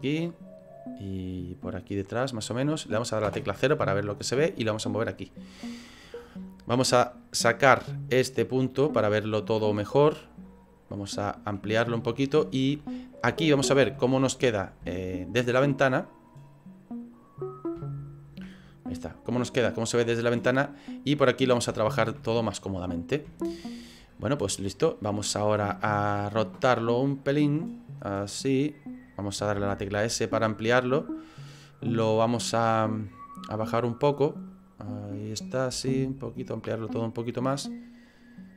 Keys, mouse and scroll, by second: 0.2 middle click, 1.7 click, 3.2 KP_0, 4.4 click, 7.2 click, 11.1-11.7 scroll up 4, 11.7-12.1 scroll down 1, 12.2 shift+middle click, 13.4 shift+middle click, 16.3 click, 17.8 shift+middle click, 18.5-18.9 scroll up 4, 19.3 shift+middle click, 20.4 middle click, 20.7 middle click, 21.8 shift+middle click, 22.3 middle click, 23.3 shift+middle click, 27.1 click, 28.0 click, 29.6 s, 32.1 middle click, 33.3 click, 34.5 click, 35.7 s, 37.7 click.